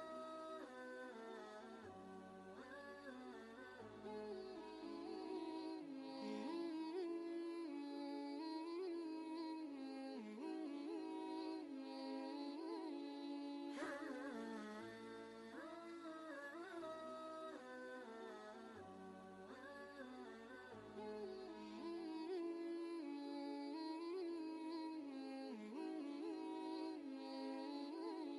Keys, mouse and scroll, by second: 0.3-2.4 drag, 0.3 typing, 2.3 typing, 2.4 ctrl+space, 2.5-4.7 ctrl+drag, 7.5 ctrl+shift+g, 9.0 y, 10.7 click, 13.1 v, 13.5 ctrl+space, 13.6 ctrl+click, 14.1 ctrl+space, 14.1 click, 15.1 v, 16.0-20.2 drag, 20.2 space, 20.4 click, 21.0 ctrl+space, 21.2 ctrl+click, 21.6 ctrl+space, 22.0 ctrl+space, 22.3 click, 22.6 space, 23.4-27.8 drag, 27.8 ctrl+space, 27.9-28.3 ctrl+drag.